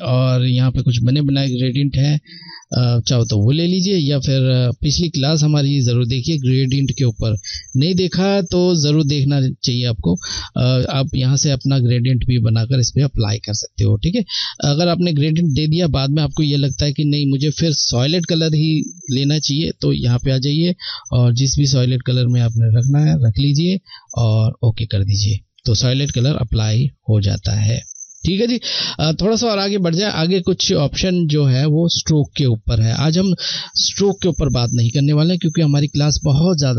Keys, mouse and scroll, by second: 1.2 click, 9.9 click, 19.8 click, 26.2 click.